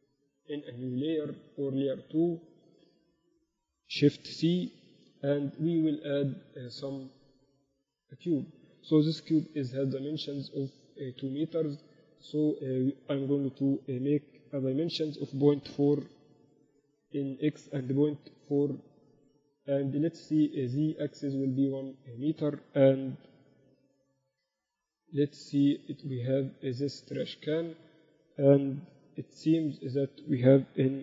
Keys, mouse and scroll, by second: 1.9-3.3 drag, 3.3 KP_1, 4.9 shift+c, 5.9 shift+a, 9.7 n, 12.9-16.5 drag, 17.6-19.6 drag, 20.1-22.2 drag, 24.3 n, 29.5 n, 30.3-31.0 drag.